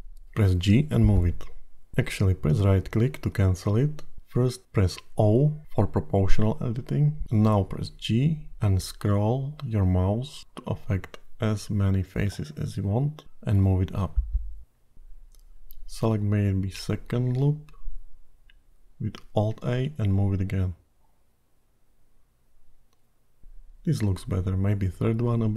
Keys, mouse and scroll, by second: 2.9 o, 6.9 g, 17.8 alt+click, 19.4 g, 23.8 middle click.